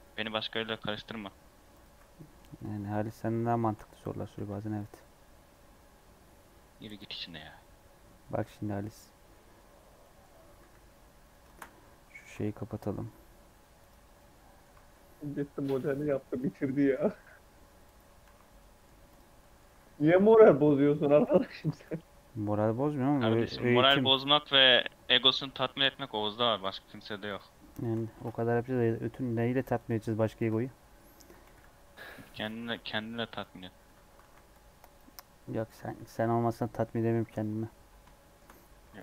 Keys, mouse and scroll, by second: 0.0 right click, 0.6 x, 2.0 scroll down 1, 2.1 middle click, 2.3 Tab, 2.6 Tab, 2.8 3, 3.0 scroll down 1, 3.2 middle click, 3.9 scroll down 2, 4.3 s, 4.9-6.0 scroll up 8, 6.0-7.1 scroll down 5, 7.1 scroll down 2, 8.3 scroll up 1, 10.0 middle click, 10.2 scroll up 2, 10.6 e, 11.4 shift+Tab, 11.7 scroll up 2, 12.2 g, 14.1 middle click, 14.7 alt+z, 16.3 click, 16.7 x, 18.2 alt+z, 18.4 scroll down 1, 18.5 middle click, 19.0 click, 19.3-20.5 middle drag, 21.7 scroll down 4, 22.8 middle click, 23.0 KP_3, 23.5 scroll down 2, 24.0 shift+middle click, 24.3 e, 25.6 shift+middle click, 26.4 s, 27.5 scroll up 1, 27.8 shift+middle click, 28.1 ctrl+r, 30.3 KP_Decimal, 30.9 scroll down 2, 31.4 g, 32.5 3, 32.9-34.1 drag, 34.1 alt+z, 34.4-36.5 drag, 36.5 i, 37.6-38.6 scroll down 3, 38.1 shift+middle click, 38.7 ctrl+r.